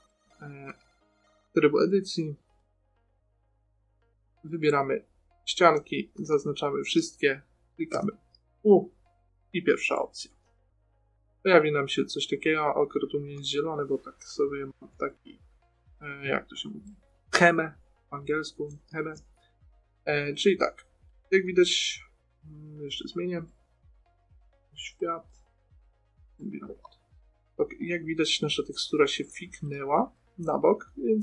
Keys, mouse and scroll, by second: 0.0 middle click, 4.8-6.7 drag, 6.5 a, 6.6 a, 11.4-15.8 middle drag, 16.3-21.4 middle drag, 21.4-23.0 right drag, 23.2 click, 26.6 click, 28.8 middle click.